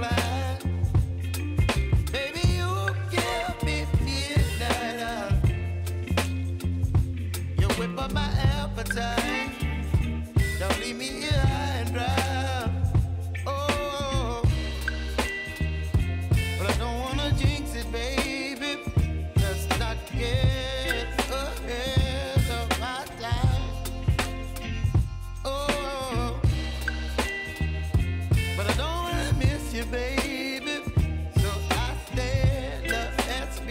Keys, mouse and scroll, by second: 3.6 ctrl+c, 4.6 click, 5.3 ctrl+v, 6.2 space, 8.9 space, 9.7 click, 10.1 ctrl+v, 11.3 ctrl+z, 12.3 click, 14.0 ctrl+v, 15.1 click, 15.6 ctrl+v, 16.9 ctrl+z, 18.1 click, 18.5 space, 20.5 click, 21.0 ctrl+v, 21.6 space, 23.8 ctrl+z, 24.8 space, 26.1-28.1 drag, 29.6 ctrl+a, 29.8-31.1 typing, 32.4 click.